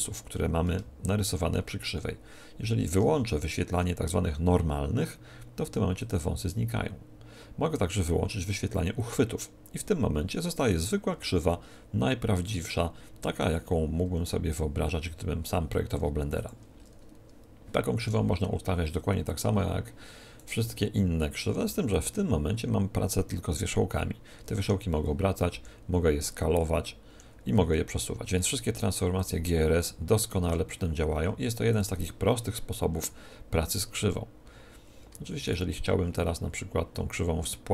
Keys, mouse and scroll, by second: 5.9-7.8 drag, 8.9-10.9 drag, 10.7-12.4 right drag, 11.1 r, 13.5-15.2 drag, 14.0 g, 16.4-18.3 drag, 18.0 r, 19.3-21.3 drag, 20.3-22.3 right drag, 20.5 g, 22.1-23.8 drag, 24.4 r, 27.6 g, 29.2-31.2 drag, 30.2-32.1 right drag, 30.4 r, 31.7-33.5 drag, 35.4-37.2 right drag.